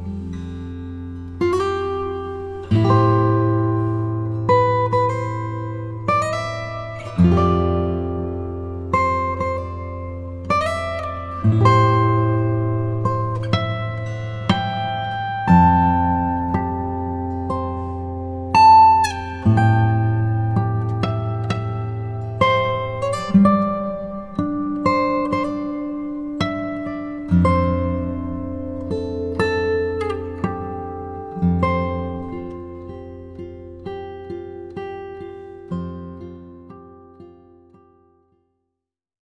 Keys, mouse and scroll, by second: 3.6 click, 6.0 click, 9.7 click, 11.8 click, 19.2 click, 23.4 click, 26.3 ctrl+shift+click, 27.2 ctrl+g, 27.9 click, 32.2 typing.